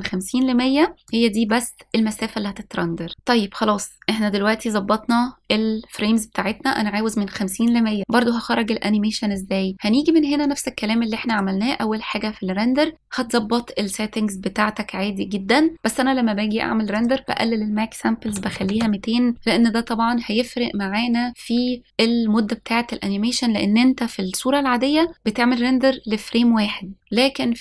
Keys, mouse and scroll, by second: 1.9-3.0 drag, 10.3-12.1 scroll up 3, 12.1 click, 12.1 scroll up 1, 17.8-19.3 drag, 19.3 KP_0.